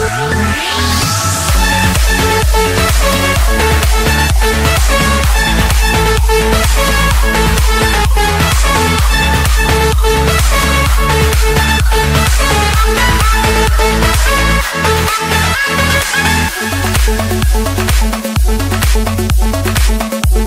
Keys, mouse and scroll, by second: 0.6 Return, 2.1 click, 3.9 click, 4.2-4.9 scroll down 7, 5.1-5.8 scroll up 4, 6.5 click, 6.7-7.5 scroll down 7, 7.7-8.6 scroll up 11, 8.6 scroll, 8.8 Escape, 9.9 click, 12.2 click, 13.4 click, 14.4 Return, 14.8 Return, 15.6-16.0 scroll up 3, 16.5-17.0 scroll up 1, 18.0 click, 20.4 click.